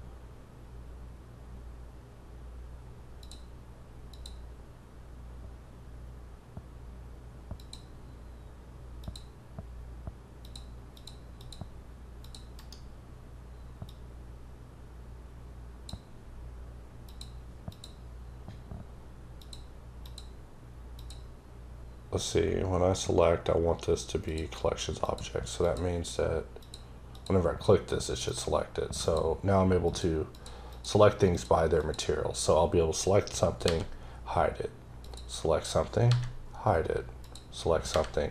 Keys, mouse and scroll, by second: 3.9 click, 7.4 click, 8.8 click, 10.2 click, 10.8 click, 11.2 click, 12.0 click, 12.4 right click, 13.7 click, 16.9 click, 17.5 click, 19.2 click, 19.9 click, 20.8 click, 24.1 click, 26.4 click, 26.9 click, 28.1 click, 28.9 click, 30.1 click, 30.5 click, 31.1 click, 31.6 click, 32.7-33.3 scroll down 6, 33.5 h, 33.8 scroll up 3, 34.8 click, 35.7 scroll down 3, 35.9 h, 36.3 scroll up 3, 37.0 click, 37.6 scroll down 3, 37.7 h.